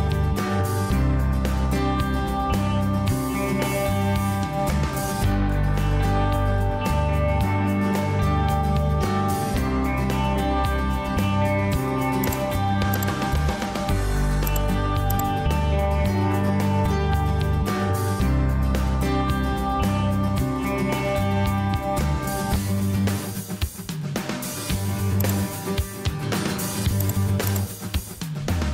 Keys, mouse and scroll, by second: 22.9 Escape.